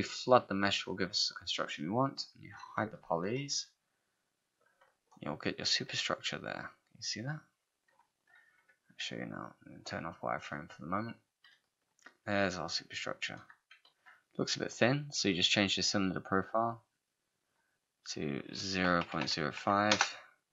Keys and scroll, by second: 3.3 ctrl+h, 18.6-19.6 typing, 19.9 Return.